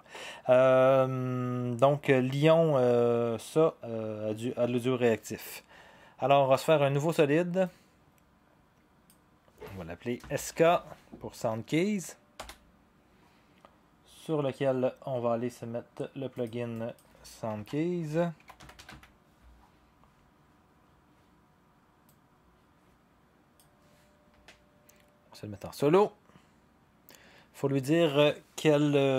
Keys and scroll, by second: 10.4-11.1 typing, 12.4 Return, 17.5-19.4 typing.